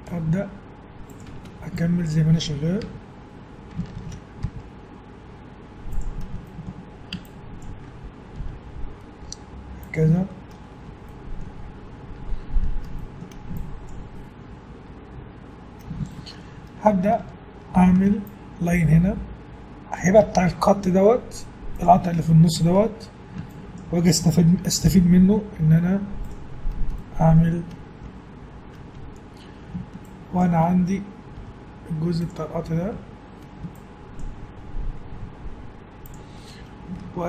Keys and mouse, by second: 1.5 a, 1.8-3.3 drag, 3.0 f, 4.0 ctrl+z, 4.4 g, 7.3-8.9 drag, 8.4 g, 10.6-13.0 middle drag, 17.8 ctrl+r, 23.1 a, 24.9 g, 30.0-31.4 drag, 31.4 g, 32.9 a, 33.9-35.3 drag, 35.1 g.